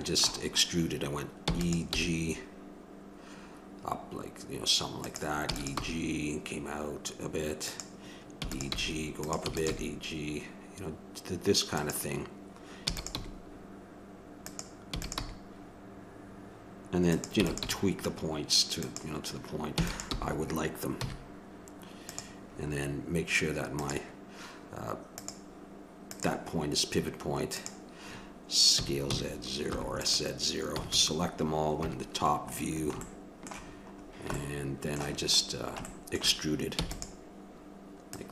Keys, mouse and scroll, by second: 5.5 e, 22.5-23.7 middle drag, 23.7-29.9 drag, 28.7 s, 30.7 a, 30.8 a, 31.7 KP_7, 33.0 middle click, 35.8-37.8 middle drag.